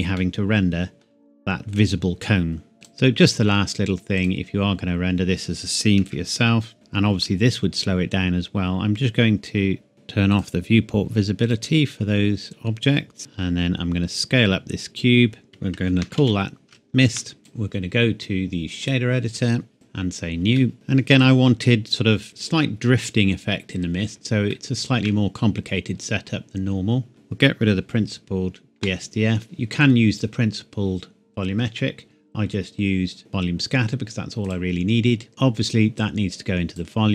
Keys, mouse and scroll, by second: 0.2 middle click, 2.7 shift+a, 6.0 KP_7, 6.7 g, 9.9 click, 13.2 s, 15.5 click, 15.8-16.2 typing, 17.1 KP_Enter, 17.4 click, 20.7 click, 21.5 scroll up 2, 24.5 shift+middle click, 26.0-26.5 scroll up 1, 27.1 click, 28.8 Delete, 29.4 click, 34.5 click, 35.3-36.0 scroll up 1, 36.0 click.